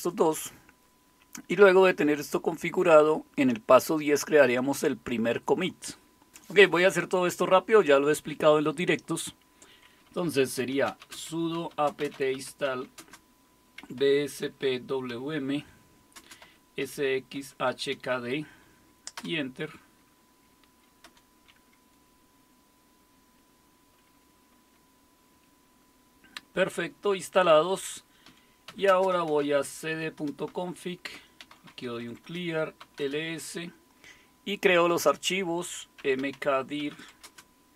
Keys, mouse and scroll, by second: 10.3-19.7 typing, 20.8-21.5 typing, 28.0-33.3 typing, 30.2 Return, 35.8-37.4 typing.